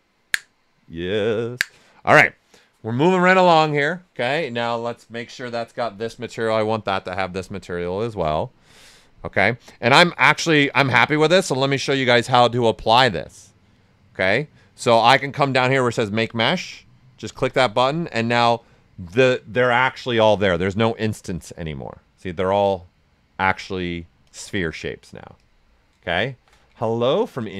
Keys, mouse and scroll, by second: 5.0 click, 7.7-9.6 right drag, 9.6-11.0 drag, 11.4-17.3 drag, 19.9 click, 20.1 shift+f, 20.7-24.2 ctrl+right drag, 24.2 click, 26.2-27.1 typing, 26.9 ctrl+right click.